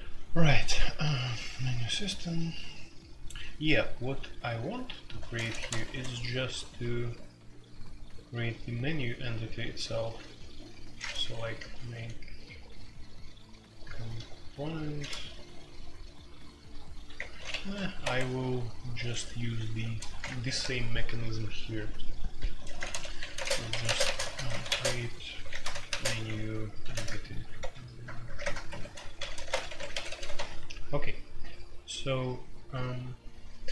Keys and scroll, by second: 0.5-2.4 typing, 3.7-5.8 typing, 11.1-11.6 typing, 13.8-14.2 typing, 15.1 ctrl+n, 17.1 Return, 18.0 Escape, 18.7-20.1 typing, 20.2 shift+Return, 20.4 Escape, 22.3-30.2 typing, 30.3 F2.